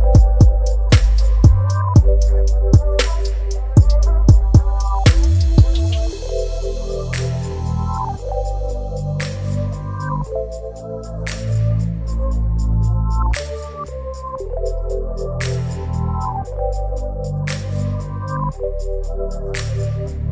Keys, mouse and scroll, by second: 0.9 v, 1.3 ctrl+t, 5.0-7.5 drag, 10.8 shift+click, 19.3-20.3 drag.